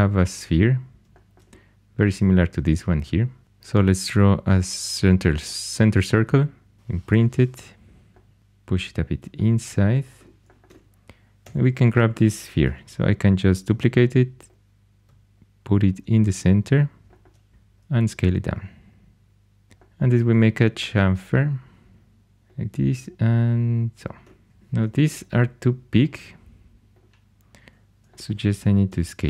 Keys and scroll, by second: 7.1 shift+|, 8.4 shift+super+e, 11.4 4, 12.6 shift+d, 17.5 s, 19.7 2, 24.5 4, 28.8 s.